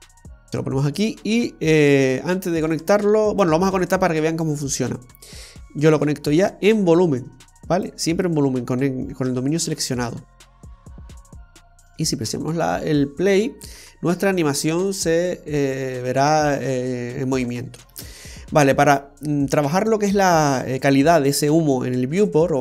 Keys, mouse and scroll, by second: 2.9 click, 4.5-5.6 scroll up 3, 5.6 click, 11.1 space, 18.1 space.